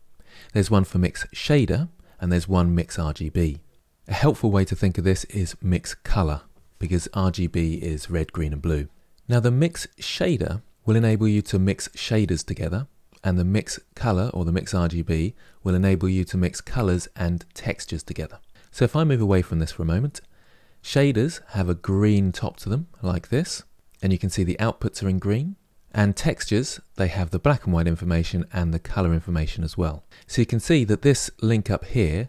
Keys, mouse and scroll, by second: 25.7 click, 32.1-32.2 drag.